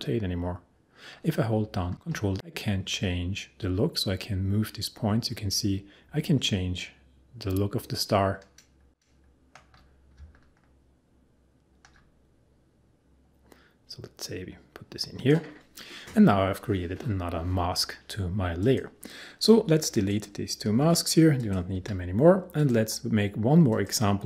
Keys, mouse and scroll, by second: 18.6 click, 20.7 Delete, 21.4 click, 21.7 Delete, 22.5 click, 23.9 click.